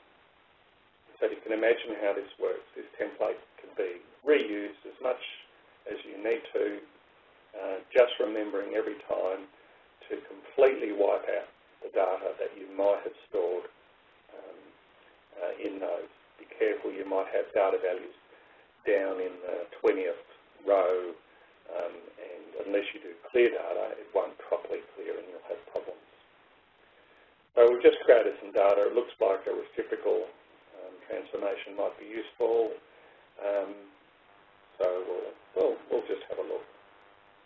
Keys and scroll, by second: 4.0 1, 4.4 Return, 5.1 2, 5.5 3, 6.4 Return, 6.6 4, 7.2 Return, 8.0 5, 9.2 Return, 10.2 Up, 13.1 ., 14.6 9, 15.2 Return, 16.1 ., 16.7 7, 18.0 Return, 18.9-20.4 typing, 20.9 Return, 22.5 0, 23.1 ., 24.4 4, 25.1 Return, 27.0-29.0 typing, 29.9 Return, 31.6 Up, 33.5 Right.